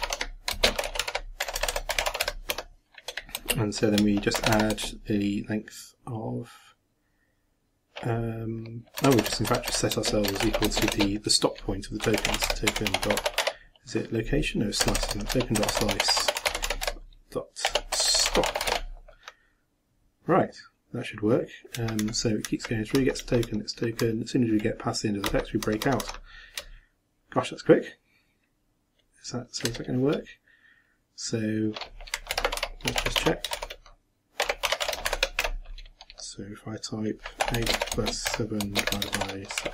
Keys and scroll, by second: 4.3 shift+=, 4.7 shift+space, 29.7 shift+Return, 32.3 ctrl+m, 32.6 ctrl+a, 32.9 ctrl+l, 33.0 ctrl+e, 33.2 ctrl+x, 33.5 ctrl+shift+-, 35.1 shift+9, 35.4 shift+', 37.7-39.7 typing.